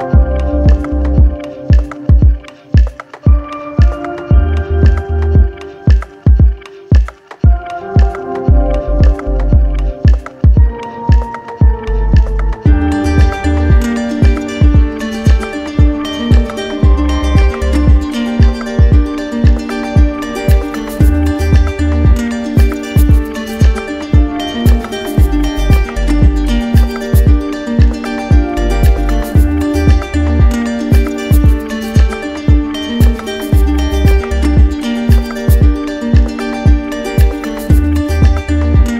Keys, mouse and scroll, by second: 1.0 shift+click, 3.8 click, 4.5 alt+click, 5.3 click, 5.9 shift+click, 7.0 click, 7.5 alt+click, 10.2 click, 11.3 click, 11.8 alt+click, 11.9 alt+click, 15.7 click, 21.3 click, 21.9 click, 26.5 click, 27.6 click, 28.3 click, 32.0 click, 33.1 click, 33.8 click, 35.1-36.1 drag, 37.4-38.9 drag.